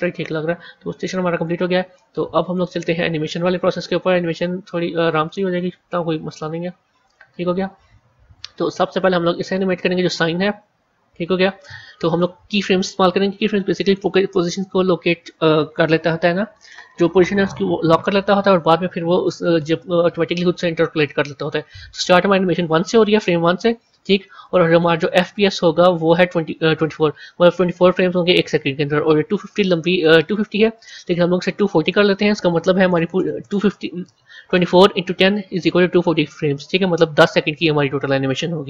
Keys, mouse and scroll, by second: 4.4 z, 7.2 scroll down 1, 8.8 click, 13.8 click, 24.3-25.3 drag, 31.7-34.9 drag.